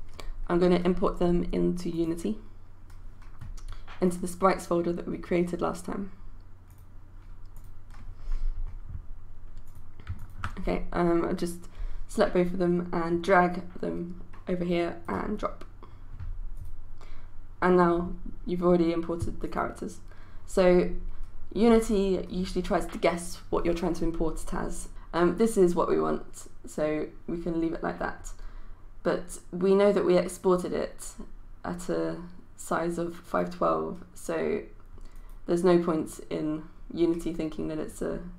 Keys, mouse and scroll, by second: 10.2-38.3 shift+drag.